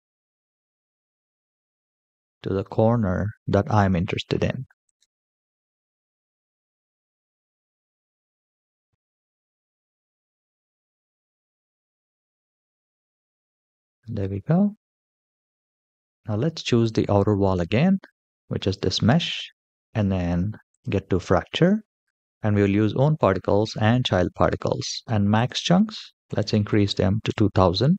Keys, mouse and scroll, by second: 5.7-7.0 middle drag, 8.0 g, 11.5-15.5 middle drag, 16.6 click, 18.1-18.4 shift+middle drag, 20.5 click, 24.1-25.1 scroll down 3, 25.1-27.0 drag, 26.5 KP_0, 26.6 KP_0.